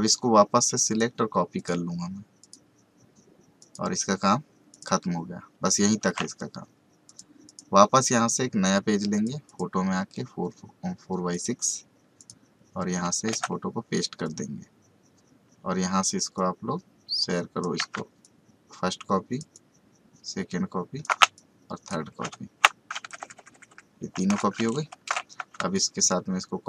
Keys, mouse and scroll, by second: 6.0 ctrl+d, 7.0 click, 13.3 ctrl+v, 14.2-18.2 drag, 18.2-23.0 ctrl+alt+shift+drag, 23.0 Right, 25.7 ctrl+alt+shift+click.